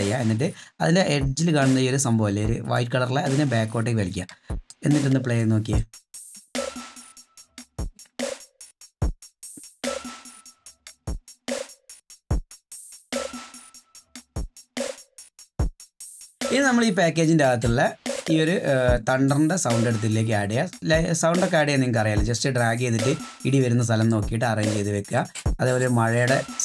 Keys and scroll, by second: 6.1 space, 16.0 space.